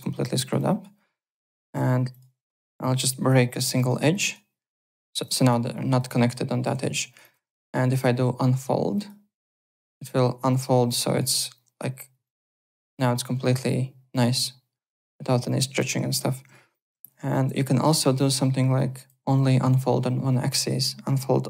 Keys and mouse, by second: 0.3 alt+right click, 0.5 alt+click, 1.5 alt+w, 1.7 2, 2.1 click, 3.3 ctrl+b, 3.5-7.4 typing, 4.1 click, 4.8 click, 5.2 click, 7.1 click, 7.5 alt+middle click, 8.9 click, 10.0 click, 12.2 alt+click, 14.3 alt+click, 15.4 click, 16.5 ctrl+z, 17.4 e, 18.1 click, 19.1 w.